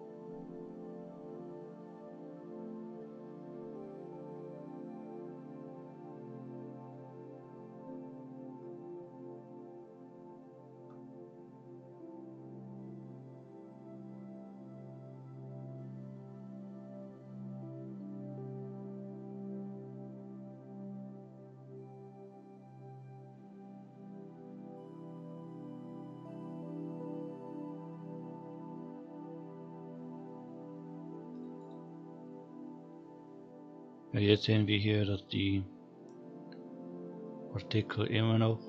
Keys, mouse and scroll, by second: 1.1-2.9 scroll down 3, 3.2 scroll up 1, 7.0-7.6 scroll up 2, 10.9 scroll down 2, 31.7 click, 35.2 click.